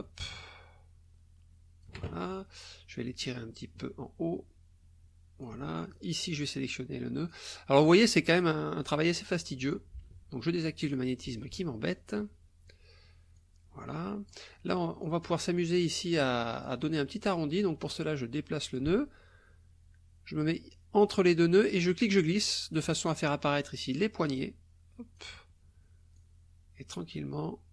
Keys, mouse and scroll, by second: 0.2-2.0 shift+drag, 3.2-5.6 alt+drag, 5.8 alt+click, 6.4 click, 8.4-9.9 drag, 10.8 click, 11.5 ctrl+z, 13.4 click, 15.0 click, 15.8 click, 17.6-18.9 drag, 21.9 click, 24.4 click, 26.2 click.